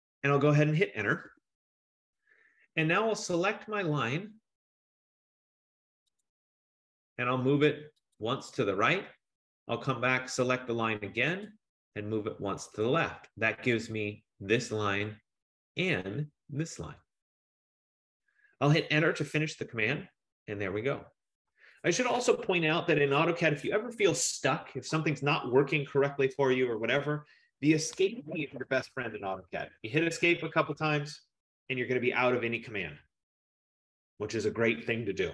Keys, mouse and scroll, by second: 1.3 Return, 6.4 click, 8.2 click, 11.5 click, 13.0 click, 19.6 Return, 21.1 F15, 30.4 Escape, 30.6 Escape, 30.8 Escape.